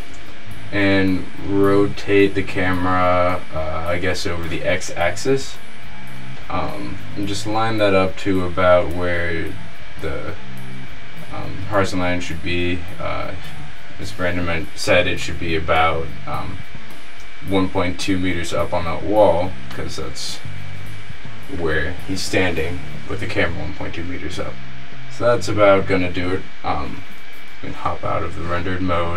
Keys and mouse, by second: 0.0-0.6 middle drag, 0.4 r, 20.2 middle click, 27.5 z.